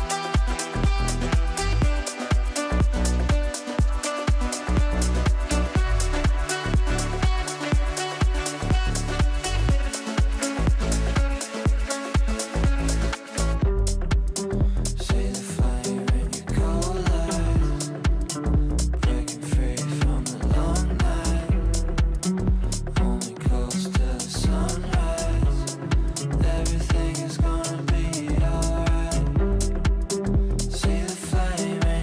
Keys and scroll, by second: 0.1 c, 29.1 ctrl+z.